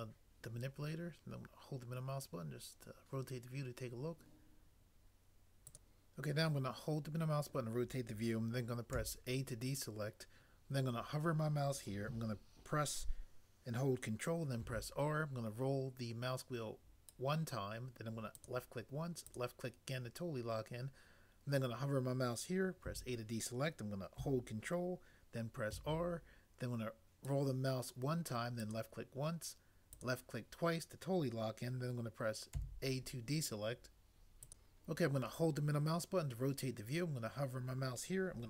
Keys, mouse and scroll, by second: 9.0 a, 14.6 ctrl+r, 22.9 a, 25.7 ctrl+r, 32.5 a.